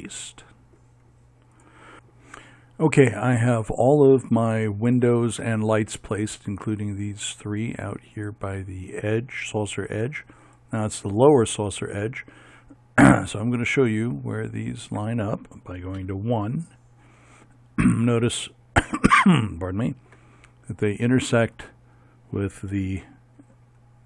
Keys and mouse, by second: 6.8-14.7 right drag, 16.1 KP_1, 16.3 middle click, 22.8 z.